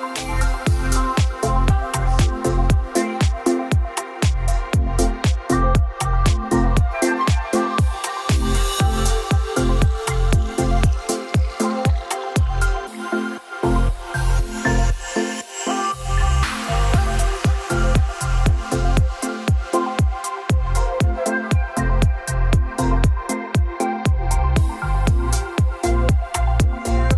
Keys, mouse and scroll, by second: 0.0 click, 1.0 click, 1.9 Escape, 3.8 click, 4.9 Escape, 5.1 Escape, 5.9 click, 6.0 click, 7.3 click, 8.2 click, 9.3 click, 9.7-10.5 scroll down 8, 10.5-11.7 scroll up 17, 12.4 click, 14.8 click, 16.7 click, 17.7 d, 18.0-20.0 scroll, 20.0 scroll, 20.0 p, 21.8 click, 24.1 click, 25.2 Escape, 25.2 right click, 26.4 click, 26.5 click, 27.0 e.